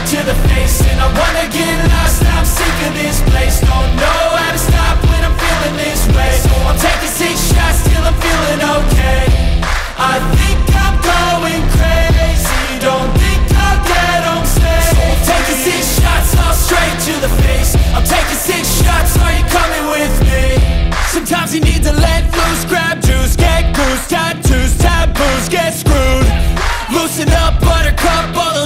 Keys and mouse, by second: 1.1 g, 7.3 Escape, 10.1-13.1 drag, 17.1 click, 18.8 r, 20.9 Escape, 22.7 click, 24.1 click, 24.3-25.9 drag, 28.1 g.